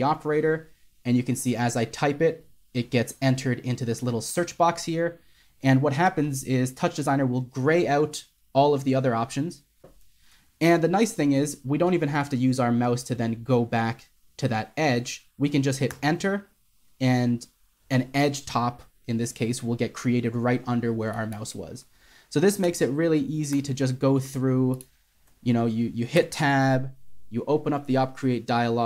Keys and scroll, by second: 0.0-0.1 typing, 10.3-11.2 typing, 22.2 typing, 26.3-27.0 typing.